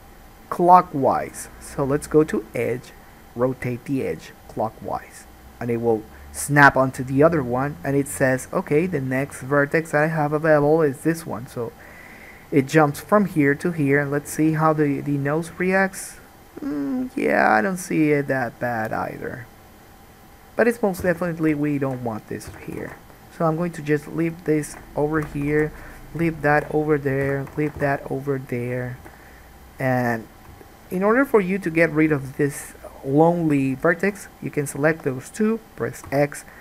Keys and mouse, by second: 2.4-21.3 drag, 21.2 3, 21.3 middle click, 21.8 shift+click, 21.9-24.3 shift+middle drag, 22.7 f, 23.0 alt+a, 24.3 click, 24.5 shift+middle click, 24.7 shift+click, 24.9-26.2 middle drag, 25.3 f, 25.7 alt+a, 26.2 click, 26.3 shift+middle click, 26.6 shift+click, 26.8-28.3 middle drag, 27.4 f, 27.7 alt+a, 27.9 1, 28.3 click, 29.2 g, 33.8 shift+click, 33.9-36.6 shift+middle drag, 36.2 x.